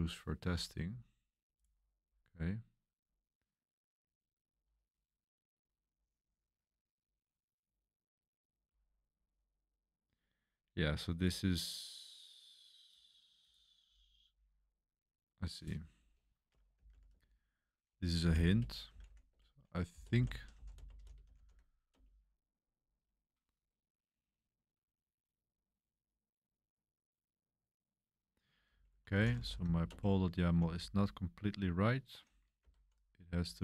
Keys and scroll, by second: 16.5-21.9 typing, 28.4-33.4 typing.